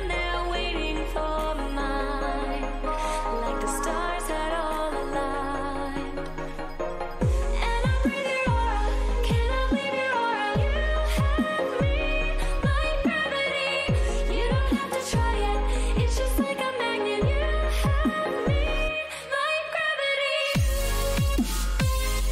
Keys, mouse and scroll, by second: 0.0 b, 1.0 g, 3.4 a, 4.3 b, 5.6 g, 8.3 a, 10.5 ctrl+r, 11.6 a, 12.7 b, 14.0 g, 18.9 a, 20.0 b, 21.3 g.